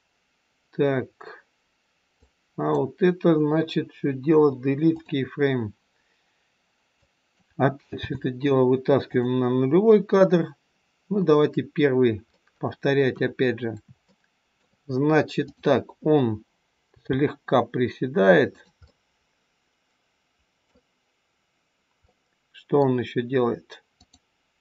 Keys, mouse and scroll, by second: 2.0 click, 4.2 Delete, 7.0 click, 8.0 g, 12.2 middle click, 13.1 KP_1, 14.1 shift+middle click, 15.4 click, 16.8 g, 18.8 middle click, 22.1 middle click, 23.9 click.